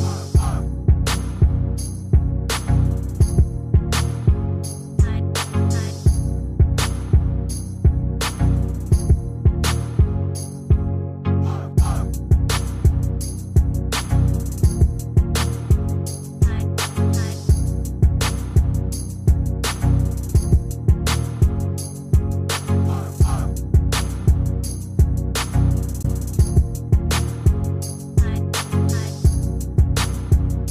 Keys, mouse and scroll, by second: 10.1-10.6 ctrl+scroll up 1, 12.0 ctrl+d, 16.2 ctrl+d, 19.4 ctrl+d, 23.3 ctrl+d, 26.1 ctrl+d, 27.3 ctrl+d, 30.1 ctrl+d.